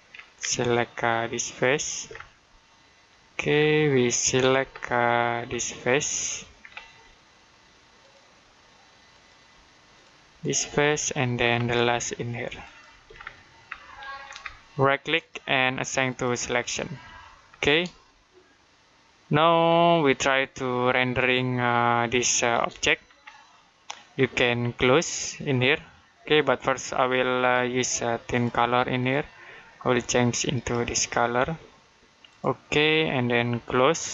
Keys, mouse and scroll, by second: 0.0-0.3 scroll up 1, 1.5 ctrl+click, 1.9 scroll down 1, 2.2 middle click, 3.4-4.4 scroll up 1, 4.6 shift+middle click, 5.8 middle click, 6.4 scroll up 1, 7.9 ctrl+click, 9.0 ctrl+click, 9.8 ctrl+click, 10.3 ctrl+click, 10.7 middle click, 11.2-11.7 scroll up 1, 12.5 click, 13.0-13.7 scroll down 1, 13.7 middle click, 15.0 right click, 15.9 click, 17.3 scroll down 1, 17.9 shift+middle click, 19.9 middle click, 22.5 middle click, 23.0-23.3 scroll up 1, 23.3 middle click, 27.2 click.